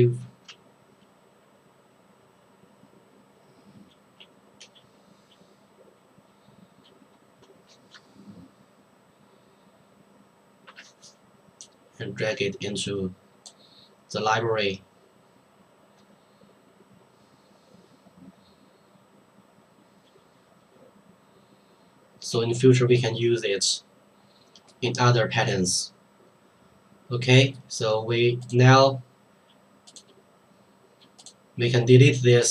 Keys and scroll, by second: 10.7 Return.